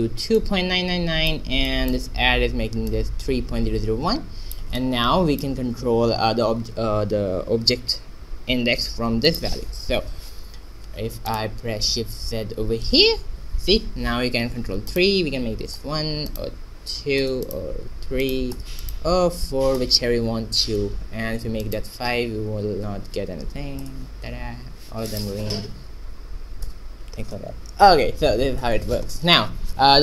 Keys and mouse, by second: 0.3-1.6 drag, 1.6 middle click, 2.1-3.9 drag, 4.7-7.1 drag, 9.2-11.2 drag, 12.3 shift+z, 13.0-14.0 drag, 14.8-20.5 drag, 21.7-23.2 drag, 25.1-26.8 drag, 29.0-30.0 middle drag.